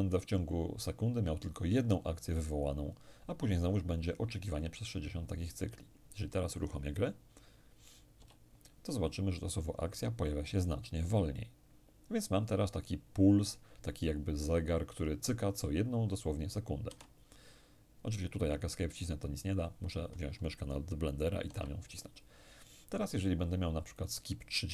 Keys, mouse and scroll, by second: 7.8 p, 16.5 Escape, 21.1 Escape, 23.6 click, 24.6 3.